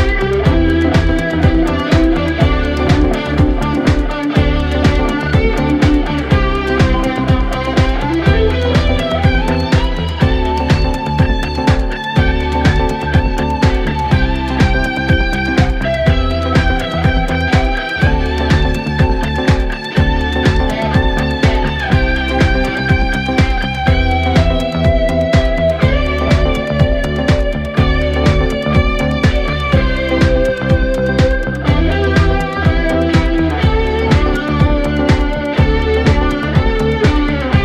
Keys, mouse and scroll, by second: 1.0-4.0 drag, 4.0-4.5 scroll down 2, 4.5 scroll up 2, 6.2-9.0 drag, 9.5-10.4 scroll down 1, 10.4-11.7 drag, 11.7-13.1 scroll down 1, 13.1 scroll down 1, 13.2-14.7 scroll up 1, 15.8-17.0 scroll down 3, 17.0 scroll down 1, 18.4-19.0 scroll up 3, 19.0-20.3 drag, 20.3-20.8 scroll down 1, 21.5-23.7 drag, 28.5 scroll up 1, 28.7-31.0 drag, 31.0 scroll down 1, 31.2-31.6 scroll up 2, 33.5 scroll down 1, 34.3 scroll up 1, 34.3 scroll down 1, 34.4-35.0 scroll up 14, 35.0 scroll down 1, 35.5-36.0 scroll up 1, 36.7 click.